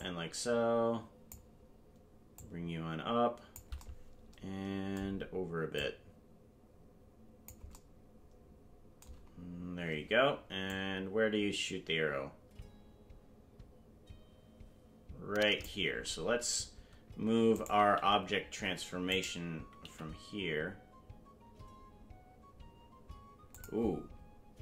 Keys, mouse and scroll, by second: 2.3-3.6 drag, 5.7-7.5 drag, 10.7-15.7 drag, 17.5 right click, 17.9 g, 19.1 right click, 19.8 g.